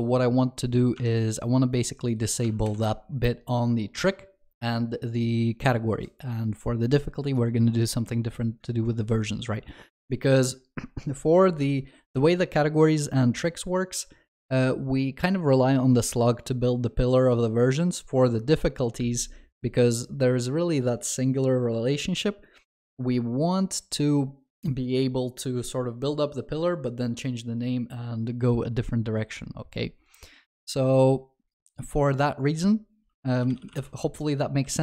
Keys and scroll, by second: 2.7 ctrl+shift+n.